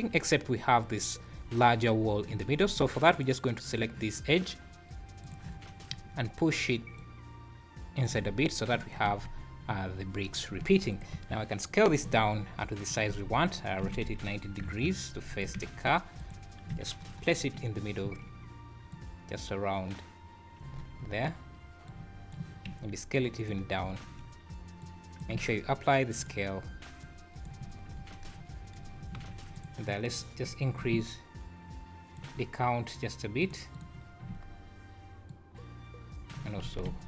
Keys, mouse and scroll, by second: 2.3 Tab, 2.6 scroll up 3, 3.1 click, 5.2 click, 6.9 click, 8.2 Tab, 8.4 scroll down 5, 9.1 alt+a, 9.3 scroll up 2, 9.7 `, 10.5-10.9 scroll down 5, 10.9 click, 11.1 KP_1, 12.0 s, 13.1 s, 13.8 r, 15.5 g, 16.6 KP_Decimal, 17.0-17.5 scroll down 5, 18.9 click, 20.8 scroll up 5, 21.9 click, 22.7 s, 23.6 scroll down 3, 24.8 click, 24.8 `, 25.4 ctrl+a, 27.0 click, 28.0 scroll up 5, 28.0 `, 28.9 scroll down 3, 29.2 alt+a, 29.6 click, 30.8 click, 33.4 click, 33.7 click, 35.3 shift+click, 36.7 alt+a, 36.9 `.